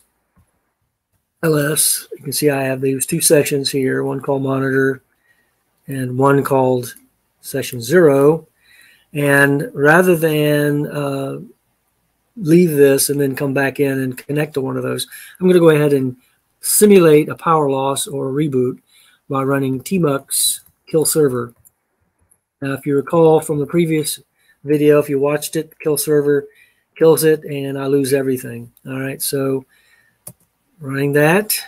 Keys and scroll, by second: 0.0-1.7 typing, 19.6-24.1 typing, 30.2 Return.